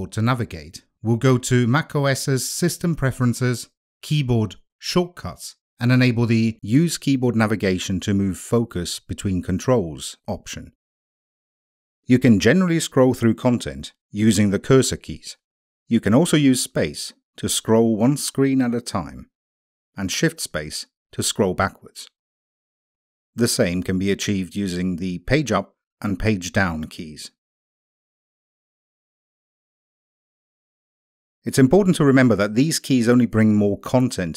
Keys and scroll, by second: 15.5 space, 16.6 space, 17.8 space, 19.0 space, 20.2 shift+space, 21.4 shift+space, 23.3 Page_Down, 24.4 Page_Down, 25.6 Page_Down, 26.9 Page_Down, 28.2 Page_Up, 29.6 Page_Up.